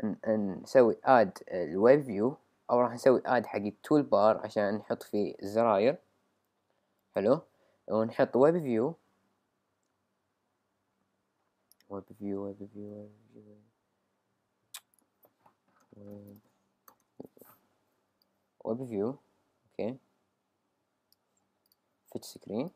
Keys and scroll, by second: 15.6-17.7 typing.